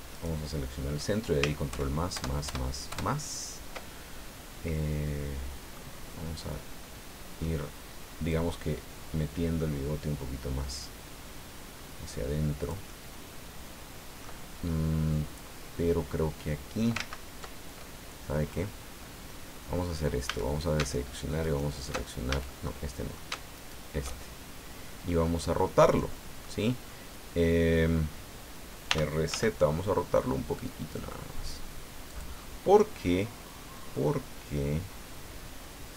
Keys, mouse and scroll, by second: 0.1 right click, 1.7 ctrl+KP_Add, 4.2-4.5 ctrl+scroll down 1, 4.7-5.9 middle drag, 6.8 middle click, 8.3-14.4 drag, 14.6-17.0 middle drag, 17.0 ctrl+z, 18.3-18.8 scroll up 2, 20.2 a, 21.4 alt+shift+right click, 22.3 alt+shift+a, 22.6 alt+shift+middle click, 23.5 alt+shift+right click, 25.1-26.6 middle drag, 28.9 r, 29.3 z, 32.1 click, 33.7-35.9 middle drag.